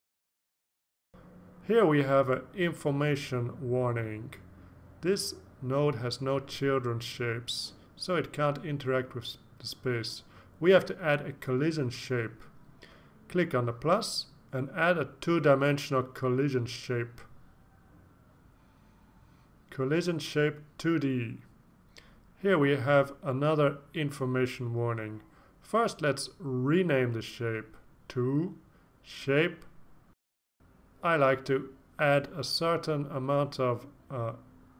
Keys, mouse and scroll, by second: 0.3 Return, 4.6 click, 13.2 click, 15.1 click, 16.7-18.2 typing, 21.0 click, 22.4 click, 25.5 click, 26.8 shift+Up, 26.9-27.8 typing, 29.0 ctrl+shift+Right, 30.8-34.5 typing.